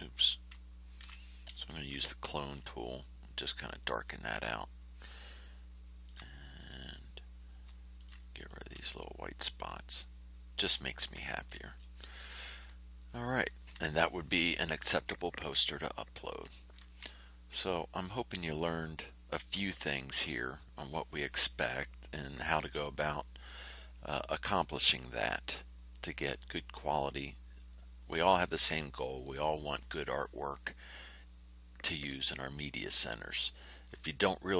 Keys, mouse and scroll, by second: 1.1 ctrl+z, 1.5 ctrl+c, 2.4 ctrl+click, 2.9 ctrl+click, 6.0 ctrl+click, 6.5 ctrl+click, 7.9 ctrl+click, 8.3 ctrl+click, 9.0-9.7 ctrl+scroll down 2, 11.4 ctrl+middle click, 11.8 click, 12.1 click, 12.3 middle click, 12.9-13.3 ctrl+scroll down 2, 15.3 ctrl+scroll up 2, 16.3 ctrl+scroll down 2, 18.4 middle click, 19.2 click, 19.6 middle click, 20.1 middle click, 22.6-24.8 middle drag, 26.4 middle click, 26.6-28.4 drag, 31.1-32.2 drag.